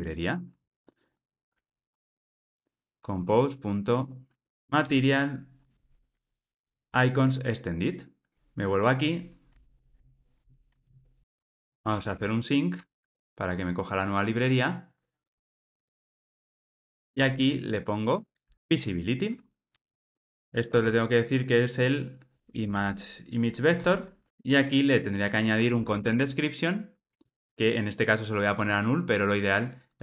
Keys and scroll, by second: 0.5 super+d, 4.5 Return, 8.3 alt+super+[, 9.5 alt+super+[, 11.1 alt+Return, 18.5 Return, 22.3 super+p, 23.7 Return, 27.2 Return.